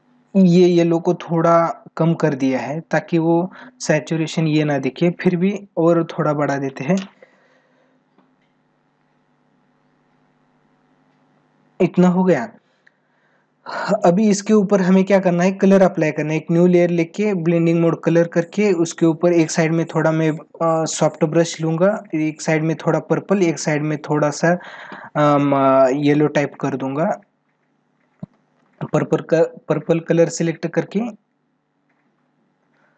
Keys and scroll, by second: 26.9 ctrl+=.